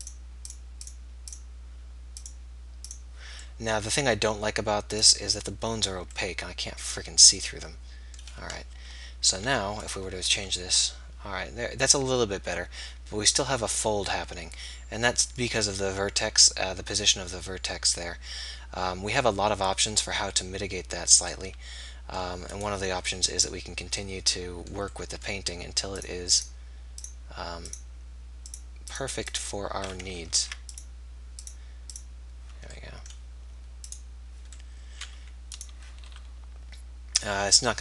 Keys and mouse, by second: 0.5-8.7 drag, 8.7 KP_3, 10.0-11.9 drag, 10.3 r, 22.6-24.4 middle drag, 26.0-35.5 drag, 30.2 ctrl+z, 30.4 ctrl+z, 35.5-37.8 middle drag, 36.1 r.